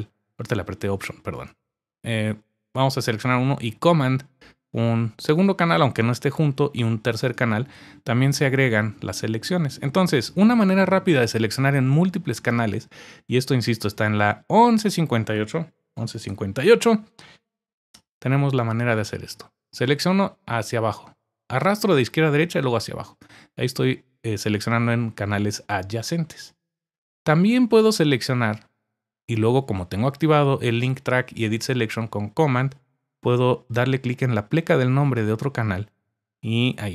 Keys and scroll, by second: 15.5-16.8 typing.